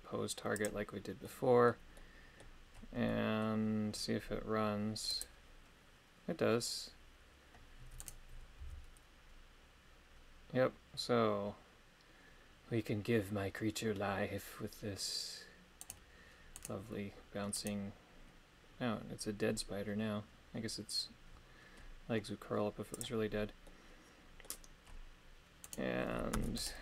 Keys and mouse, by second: 1.2 middle click, 1.9 middle click, 3.1 middle click, 5.1 click, 8.1 right click, 8.6 g, 15.8 right click, 16.6 right click, 17.6 right click, 22.9 click, 23.7-25.7 middle drag, 25.7 right click, 26.4 ctrl+Tab, 26.6 right click.